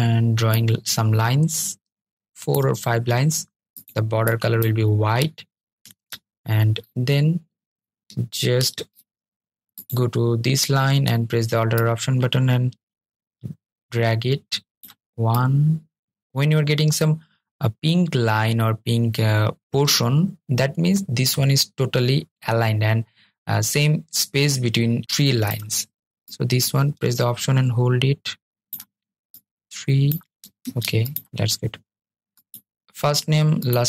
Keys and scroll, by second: 29.6 super+z.